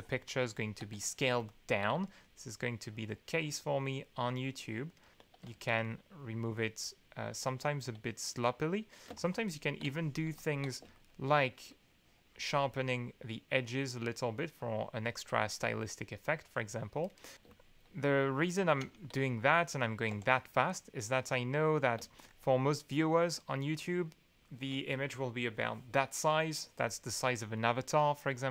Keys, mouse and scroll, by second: 0.4 ctrl+click, 1.0 ctrl+click, 2.2 ctrl+click, 2.8-4.0 drag, 4.5 click, 5.0 click, 5.5 ctrl+z, 5.8 ctrl+click, 6.4 click, 9.1 ctrl+space, 9.1-10.8 ctrl+drag, 10.9 ctrl+shift+click, 11.7 shift+click, 12.7-14.8 drag, 15.7 click, 16.4 click, 17.1 click, 17.4 ctrl+space, 17.6 ctrl+click, 18.3 click, 18.8 ctrl+z, 19.1 ctrl+click, 20.1 2, 21.9 ctrl+space, 22.2-24.6 ctrl+drag.